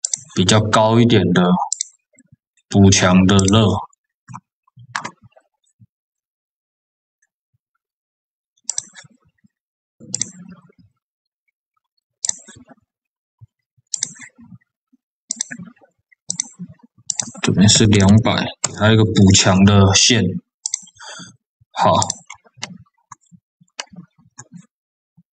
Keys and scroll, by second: 17.8 KP_0, 18.5 Return.